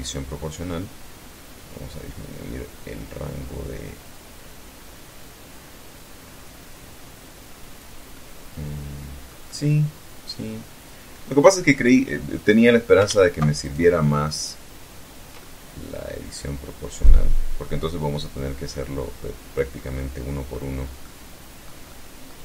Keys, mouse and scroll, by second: 1.4-1.9 scroll up 1, 7.3-10.7 middle drag, 11.5 right click, 12.8 alt+shift+right click, 13.4 shift+right click, 14.5-15.4 shift+middle drag, 16.2-18.9 drag, 19.0-19.9 middle drag, 20.2 middle click, 21.9 shift+right click.